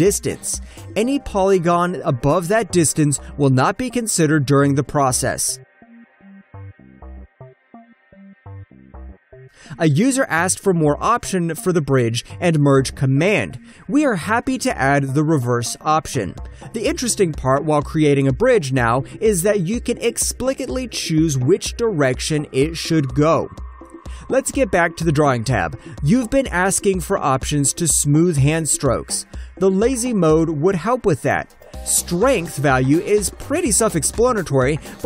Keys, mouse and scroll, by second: 0.1 double click, 1.1 shift+middle click, 4.0 click, 4.2 double click, 4.9 shift+middle click, 5.6 alt+click, 7.6 alt+right click, 8.0 alt+click, 8.5 alt+right click, 9.1 alt+click, 9.4 alt+middle click, 9.7 alt+right click, 9.9 alt+middle click, 10.4 ctrl+shift+click, 11.3 ctrl+shift+click, 11.7 alt+scroll up 1, 12.0 alt+middle click, 12.5 ctrl+middle click, 13.8 click, 14.9 double click, 16.1 ctrl+middle click, 17.3 ctrl+middle click, 18.0 click, 18.7 ctrl+middle click, 21.1 click, 21.4 alt+right click, 21.6 alt+Return, 21.9 alt+middle click, 22.1-22.4 alt+scroll down 1, 22.4 shift+middle click, 23.1 alt+click, 23.3 ctrl+shift+middle click, 24.3 alt+click, 24.8 alt+middle click, 25.2 alt+click, 25.4 alt+right click, 26.8 alt+middle click, 28.3 alt+click, 29.1 alt+right click, 30.3 click, 31.2 alt+middle click, 32.4 click.